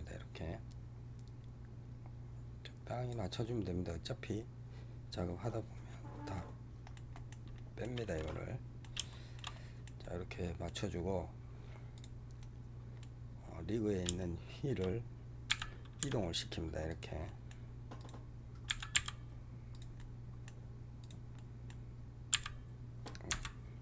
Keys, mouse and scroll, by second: 6.2-7.9 middle drag, 7.9 scroll down 1, 8.1-11.1 middle drag, 11.1 scroll up 2, 11.8 click, 12.3-13.7 middle drag, 13.7 scroll down 2, 14.0-15.4 shift+middle drag, 15.4 g, 17.1-17.9 middle drag, 17.9 click, 18.6 g, 19.9-20.9 middle drag, 20.9 click, 21.2 middle click, 22.2 x, 23.2 Escape.